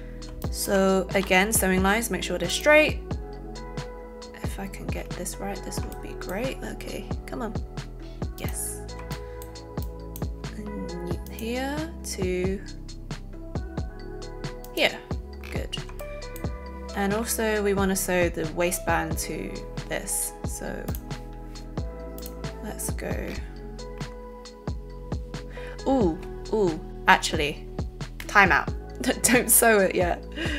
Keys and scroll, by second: 1.2 alt+n.